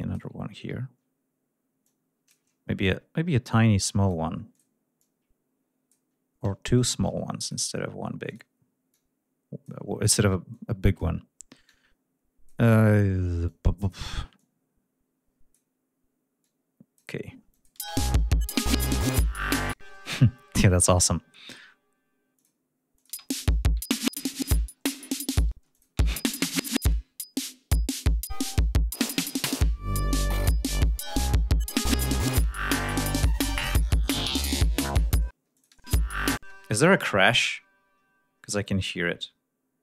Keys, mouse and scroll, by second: 0.3 ctrl+scroll up 2, 1.8 click, 2.4 ctrl+scroll up 2, 3.4 click, 4.5 click, 4.9 click, 6.7 shift+right click, 7.4 shift+click, 8.2 click, 8.9 click, 10.4 click, 11.6 click, 13.4 click, 14.3-15.7 drag, 16.4 click, 17.5 click, 17.7 space, 19.7 space, 20.1-20.4 scroll up 2, 22.3 click, 22.9 click, 23.1 space, 23.4 ctrl+scroll down 2, 24.7 ctrl+scroll down 2, 25.7 click, 25.7 space, 26.0 ctrl+scroll up 2, 27.1 ctrl+scroll down 2, 28.3 click, 28.6 ctrl+scroll down 2, 29.4 ctrl+scroll down 2, 29.9 ctrl+scroll up 2, 32.8 ctrl+scroll down 2, 35.3 ctrl+space, 35.5 ctrl+click, 36.3 space, 36.5-38.9 scroll down 10, 39.1-39.5 scroll down 2, 39.6-39.8 scroll up 2.